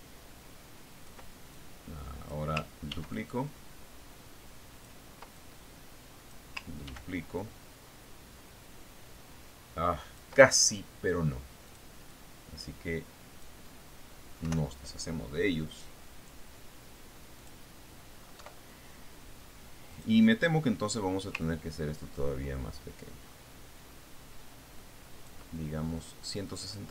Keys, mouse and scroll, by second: 3.0-4.1 ctrl+drag, 4.4 ctrl+d, 4.6-6.6 ctrl+drag, 6.8-8.2 ctrl+drag, 8.4 ctrl+d, 8.8-11.9 ctrl+drag, 13.2 click, 13.6-15.1 drag, 16.0 Delete, 18.9 click, 19.9 Delete, 21.4 click, 22.9-26.9 ctrl+drag.